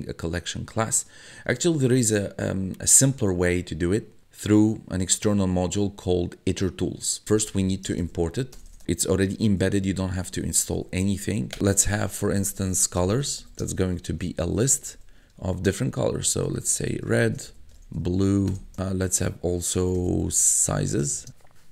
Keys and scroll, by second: 7.1-18.5 typing, 11.5 Return, 19.5-21.0 typing.